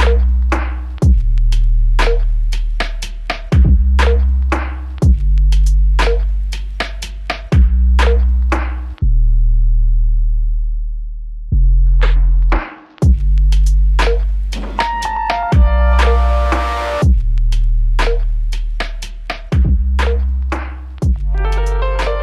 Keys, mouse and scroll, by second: 7.1 alt+click, 13.4 alt+click, 16.8 typing.